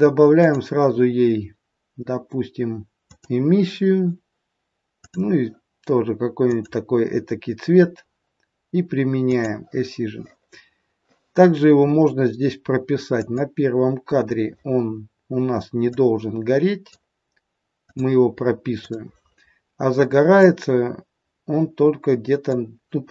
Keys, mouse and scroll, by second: 0.2 click, 5.0 click, 9.1 click, 13.2 click, 15.9 click, 18.0 click, 18.9 click, 20.5 click.